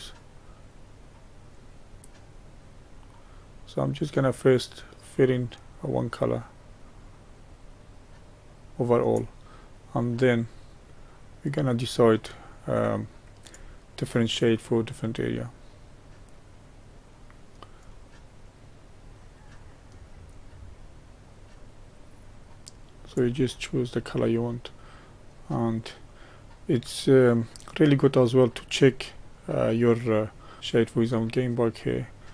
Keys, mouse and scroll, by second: 10.3-14.2 drag, 15.0-17.9 drag, 18.6-24.0 drag, 24.0-25.5 middle drag, 25.5-26.3 scroll up 3, 26.3-30.3 middle drag, 30.3 click, 31.2 click.